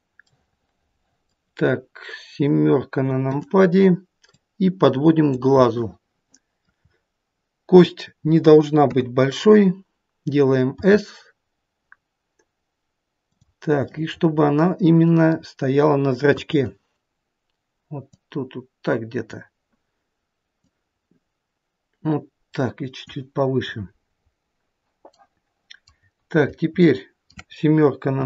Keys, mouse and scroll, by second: 0.5 middle click, 0.7 middle click, 2.0-3.4 scroll down 1, 3.4 KP_7, 4.5 click, 5.8 middle click, 7.0-7.5 scroll up 2, 10.2 KP_3, 10.9 s, 14.4 middle click, 16.5 middle click, 16.5 KP_1, 18.3 click, 20.8 click, 25.4 middle click, 26.6-26.9 scroll down 2, 26.9 shift+middle click, 28.1 KP_7.